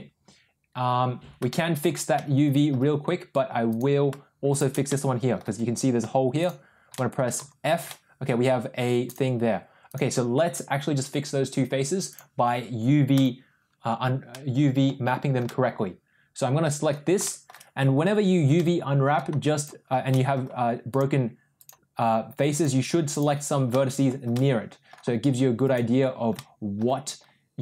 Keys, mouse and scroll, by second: 1.5 shift+middle click, 2.1 middle click, 3.6 click, 4.4 shift+click, 4.9 middle click, 6.9 middle click, 7.4 f, 7.9 middle click, 9.0 click, 9.7 click, 12.0 click, 13.0 click, 14.2 middle click, 15.4-16.8 middle drag, 17.2 shift+middle click, 18.5 middle click, 19.6 shift+click, 20.1 shift+middle click, 20.8 shift+click, 22.4 shift+click, 23.1 shift+click, 23.7 middle click, 24.3 middle click, 25.5 shift+click, 26.3 middle click.